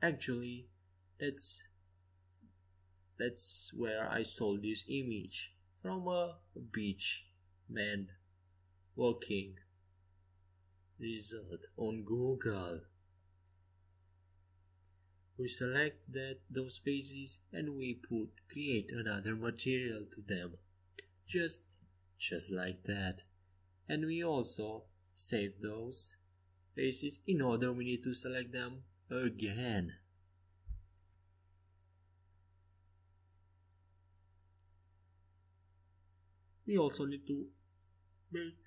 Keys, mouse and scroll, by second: 17.0-19.4 drag, 18.4 z, 19.4 a, 23.3-30.6 drag, 30.6 s, 34.4 e, 36.2 s.